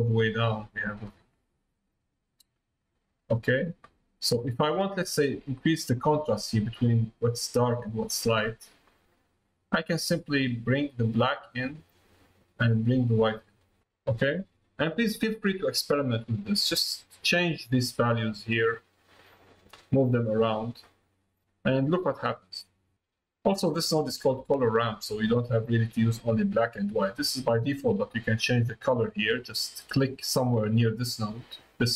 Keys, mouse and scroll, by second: 0.0-3.7 drag, 4.8 middle click, 5.8 middle click, 9.5-12.2 drag, 13.3 click, 13.8 middle click, 14.7 middle click, 15.2 middle click, 17.9 click, 18.9 click, 19.6 click, 24.1 click, 26.4 click, 29.9 click.